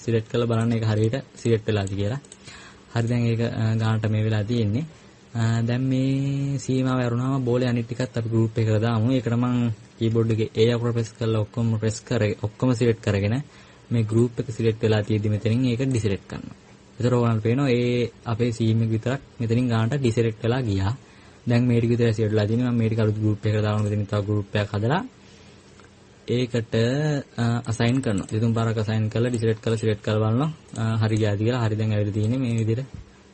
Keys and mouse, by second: 33.0-33.3 drag.